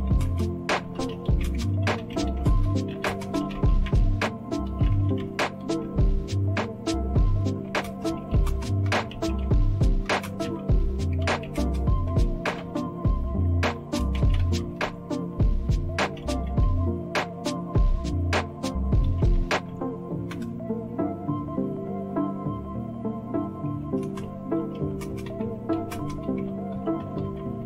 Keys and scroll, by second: 0.0-6.3 typing, 7.4-20.2 typing, 20.3 Return, 23.5-27.6 typing.